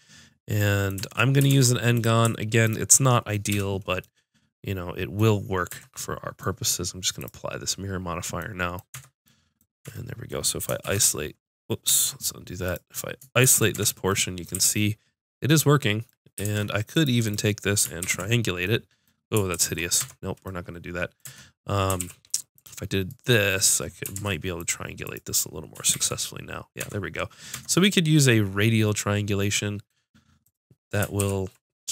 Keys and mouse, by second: 1.5 ctrl+Tab, 2.6 click, 3.5 f, 5.7 Tab, 7.2-8.5 drag, 8.9 Tab, 9.8 Tab, 10.8 shift+h, 12.0 ctrl+z, 13.4 shift+h, 13.7 Tab, 14.5 a, 16.4 ctrl+Tab, 17.7 click, 18.0 ctrl+t, 19.5 ctrl+z, 20.0 Tab, 21.3 Tab, 22.0 ctrl+r, 24.1 ctrl+Tab, 25.0 click, 25.9 ctrl+t, 26.8 Tab, 27.5 Tab, 31.2 ctrl+t.